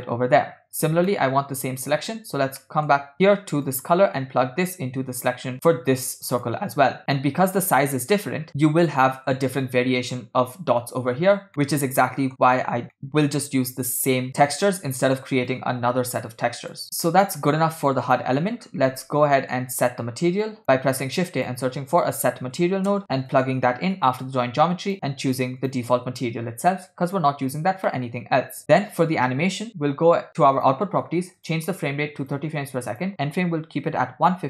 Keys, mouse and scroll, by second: 0.6 scroll down 1, 0.8-1.1 scroll up 1, 1.2 middle click, 2.7 middle click, 3.7-6.6 drag, 11.4-11.8 scroll down 2, 11.6 middle click, 11.6 scroll up 1, 12.7 scroll down 1, 13.2 middle click, 13.2 scroll down 1, 13.3-13.9 scroll up 1, 13.9 click, 15.5-18.2 drag, 18.6 scroll down 1, 19.0 middle click, 19.9-20.5 scroll up 2, 20.5 click, 20.9 shift+a, 24.9 click, 27.2-27.7 scroll down 2, 28.0 middle click, 30.6 click, 31.4-32.4 drag, 32.9-34.4 drag.